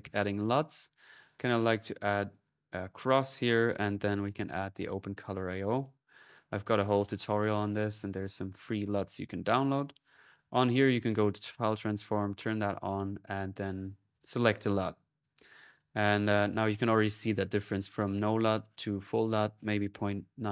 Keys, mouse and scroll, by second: 0.0-0.6 typing, 0.9 click, 1.7 middle click, 1.9 click, 3.0 middle click, 4.3-5.0 typing, 4.8-7.8 drag, 8.0-10.1 drag, 8.1-8.8 typing, 10.7 click, 11.2 click, 12.2-13.2 drag, 13.3-14.0 typing, 15.0-16.9 drag, 17.2-18.8 drag, 19.2-20.3 drag.